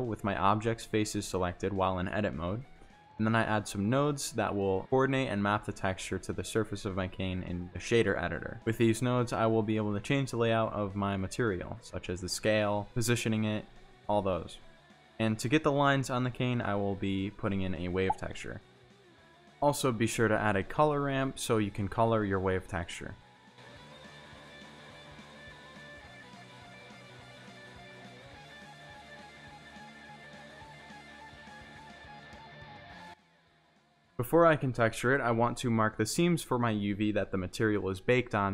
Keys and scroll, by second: 3.3 shift+a, 5.1 c, 5.2 o, 5.4 r, 5.6 d, 5.7 Return, 7.7 a, 9.1 a, 9.1 p, 9.7 Return, 13.0 a, 14.0 w, 14.1 a, 14.3 v, 14.5 e, 14.6 Return, 16.8-18.0 typing, 18.4 Down, 18.6 Return, 21.9 g, 30.1 ctrl+e, 37.2 a, 38.3 u.